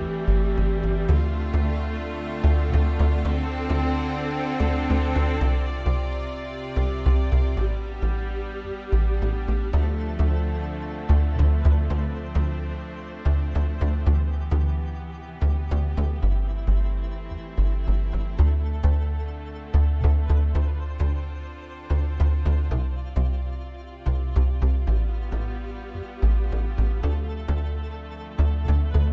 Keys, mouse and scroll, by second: 0.5-1.3 scroll up 1, 1.5-2.0 scroll down 2, 4.0-4.9 drag, 6.1 click, 9.3 click, 11.2 click, 12.4 click, 14.5 click, 17.1 click, 19.8 click, 20.4 click, 21.3 click, 22.5 click, 23.7 click, 28.0 click.